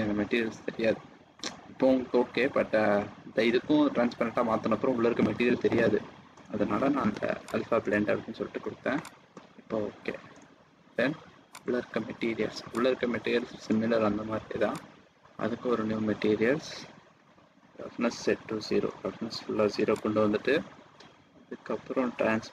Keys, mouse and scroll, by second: 2.4 middle click, 6.9-7.8 scroll down 1, 7.8 click, 10.2 middle click, 10.9 scroll down 2, 11.5 click, 12.7 click, 17.2-17.7 scroll down 2, 17.8-18.2 scroll up 1, 18.2-19.0 scroll down 2, 18.6-19.0 scroll up 1, 19.9 click, 19.9-20.5 scroll down 1, 21.7-22.3 scroll down 6, 22.3-22.5 scroll up 1.